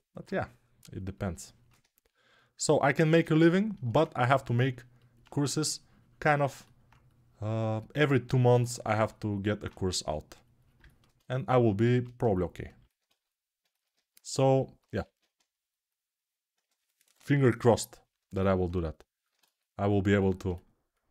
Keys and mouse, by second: 0.0-10.8 right drag, 10.8-18.0 ctrl+alt+drag, 11.8 alt+q, 14.9 alt+q, 20.7-21.1 alt+shift+right drag.